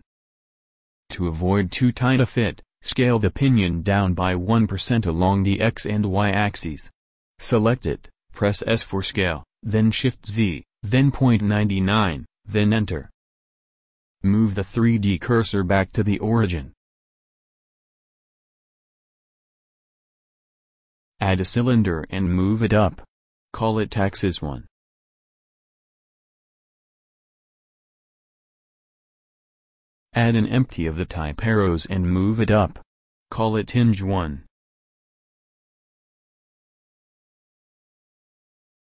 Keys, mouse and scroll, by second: 7.2 click, 7.7 KP_1, 8.6 shift+s, 11.1 s, 17.4 shift+s, 21.7 shift+a, 25.2 s, 26.2 g, 27.8-29.4 drag, 30.5 shift+a, 34.8 s, 35.5 s, 36.2 g, 38.7-38.8 drag.